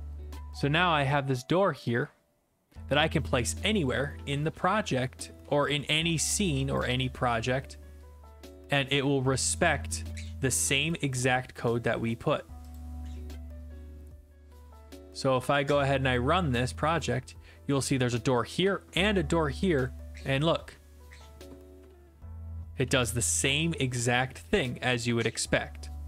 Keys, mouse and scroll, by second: 0.2 click, 2.9 click, 3.9-5.4 typing, 5.7-8.7 right drag, 8.7 click, 8.9-9.6 typing, 9.6-10.6 right drag, 10.9 click, 12.8 click, 15.0 click, 15.4 click, 17.7 a, 19.6-24.7 typing.